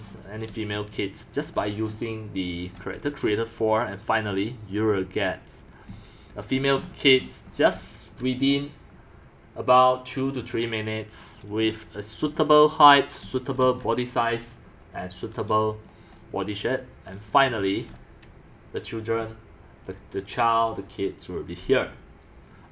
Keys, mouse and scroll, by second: 0.1-1.7 middle drag, 0.5-3.6 typing, 1.8-3.0 middle drag, 3.4 click, 5.2 click, 5.9 c, 6.4 c, 6.5 c, 6.6 click, 6.8-7.7 scroll, 7.7 c, 8.5 click, 11.7-12.5 scroll, 12.1 middle click, 12.4 middle click, 13.0-14.2 typing, 13.8-16.7 drag, 17.3 click, 17.6 x, 20.1-21.9 drag, 22.6 click.